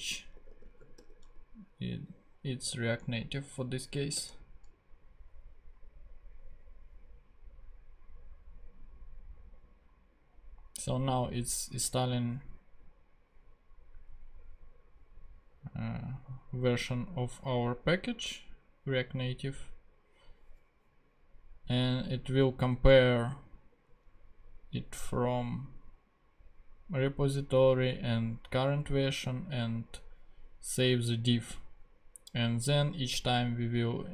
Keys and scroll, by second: 0.0-1.5 typing, 4.1 Return.